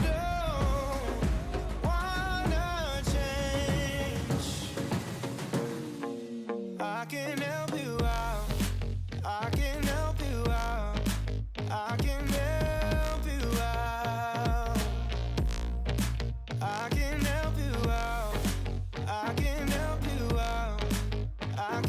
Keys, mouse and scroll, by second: 0.5 KP_1, 0.7-1.4 scroll up 5, 0.9 shift+middle click, 1.4 g, 3.6 KP_3, 4.2 g, 6.3 ,, 7.2 shift+middle click, 8.1 alt+z, 8.3 scroll down 4, 8.5-9.6 middle drag, 9.6 KP_3, 9.8-10.3 scroll up 5, 10.3 g, 12.2 scroll down 3, 12.4 middle click, 12.9 scroll up 1, 13.1 middle click, 13.9 scroll up 2, 14.1-14.7 middle drag, 14.7-16.1 scroll down 3, 16.1 drag, 16.3 shift+middle click, 16.7-17.1 scroll up 1, 17.1 ctrl+r, 18.6 3, 18.9-19.6 middle drag, 19.6 alt+click, 20.1 KP_3, 20.3 alt+z, 20.8-21.5 shift+drag, 21.5 alt+z, 21.7-21.8 middle drag.